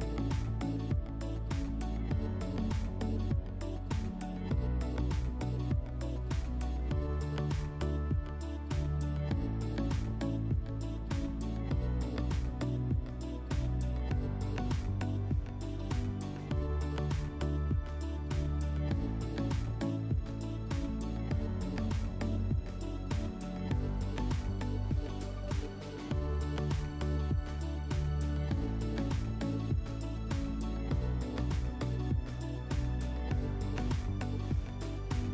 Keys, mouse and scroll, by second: 24.3-25.9 drag, 35.1 click.